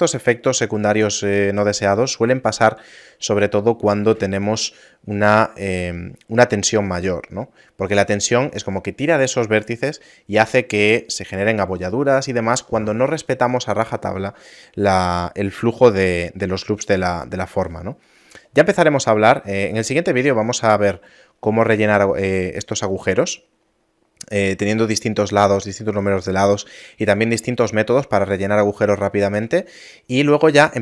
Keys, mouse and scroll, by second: 19.9 middle click, 20.3 scroll down 4, 22.1 middle click, 23.3 middle click, 23.7 scroll down 2, 24.3 middle click, 26.0 shift+middle click, 26.2 shift+middle click, 27.1 middle click, 27.7 scroll up 3, 28.9 scroll up 4, 29.1 shift+middle click, 29.9 middle click, 30.7 shift+middle click.